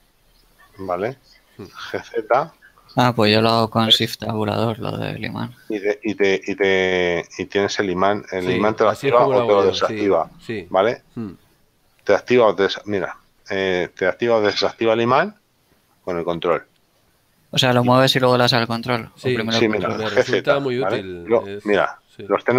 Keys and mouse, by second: 1.8 g, 2.7 z, 20.1 g, 20.8 z, 22.4 click.